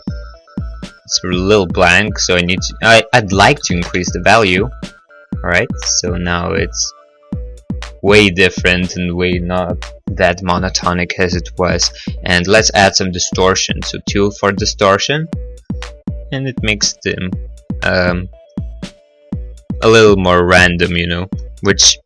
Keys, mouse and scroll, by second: 2.5 click, 3.7 1, 3.7 5, 4.0 Return, 4.0 0, 12.1 click, 13.5 Return, 13.5 2, 20.4 middle click, 20.6 middle click, 20.9-22.0 scroll.